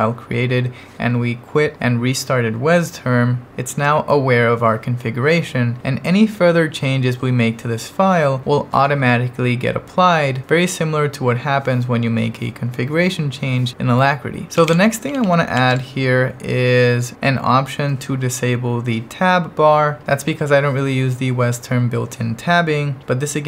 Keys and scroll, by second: 14.2-16.0 typing.